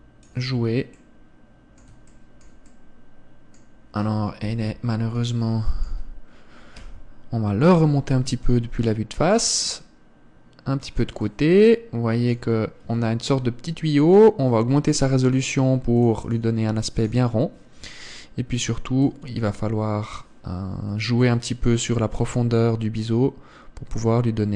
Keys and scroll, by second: 5.0 KP_1.